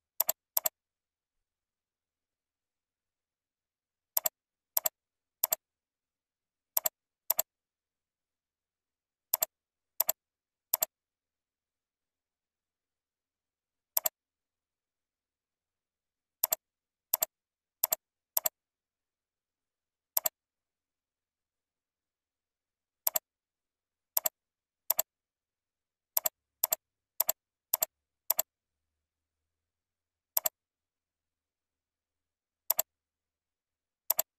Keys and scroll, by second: 14.8 ctrl+r, 21.2 ctrl+b.